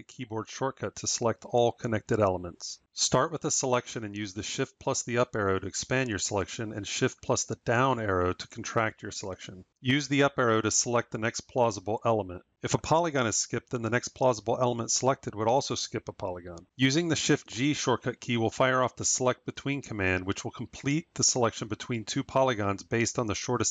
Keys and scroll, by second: 4.3 shift+Up, 7.1 shift+Down, 9.7 Up, 14.8 Up, 17.0 shift+g.